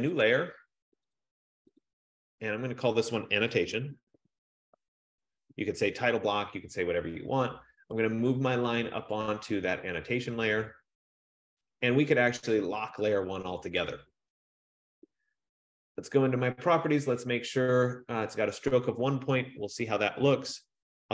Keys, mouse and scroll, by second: 0.4 click, 1.3 click, 2.0 click, 2.4 click, 3.6-5.5 typing, 9.3 click, 9.7-10.5 typing, 12.8 click, 15.5 F15.